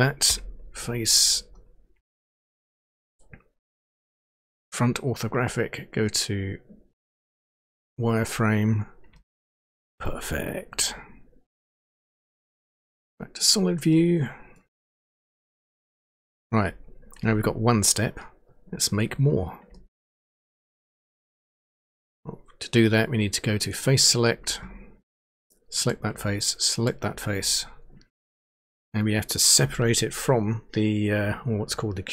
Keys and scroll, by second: 0.3 End.